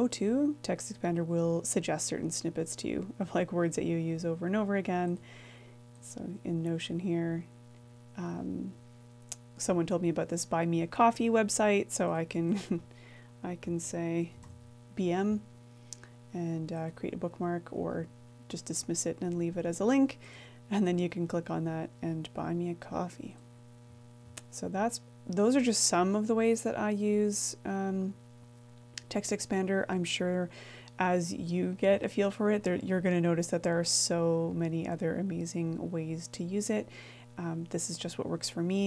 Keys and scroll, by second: 16.5-17.8 typing.